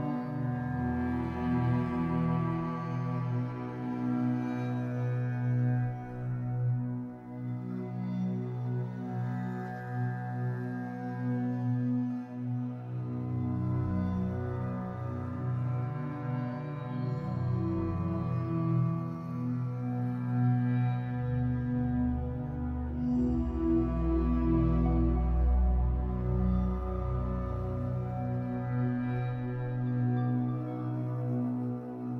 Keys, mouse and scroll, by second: 2.0 KP_1, 3.3 shift+d, 3.6 click, 3.7-7.4 middle drag, 7.1 e, 7.4 click, 8.1 click, 9.6 KP_1, 10.8 click, 12.3-12.8 scroll up 1, 13.0 click, 13.4 g, 14.1 click, 15.2 g, 16.8 click, 17.1 middle click, 17.8 click, 18.2 middle click, 18.6 click, 19.4 KP_1, 20.0 g, 21.5 click, 22.4 g, 24.1 click, 27.1 shift+click, 27.3 scroll down 1, 27.5-29.5 shift+middle drag, 27.7-28.6 scroll up 1, 28.6 e, 29.5 click, 30.0 e, 31.1 click, 31.7 e.